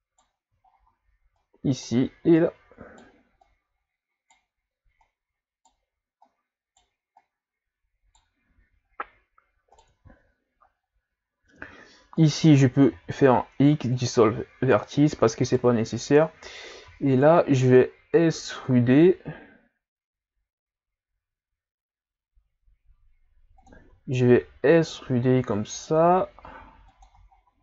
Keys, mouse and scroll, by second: 0.7-1.2 shift+scroll up 3, 1.4 right click, 2.4 right click, 3.4 right click, 5.0-6.5 right drag, 7.2 right click, 8.9 ctrl+scroll up 1, 9.7 right click, 12.2 right click, 12.9 x, 15.5 right click, 16.9 e, 23.9 e, 27.3-27.6 shift+scroll down 4.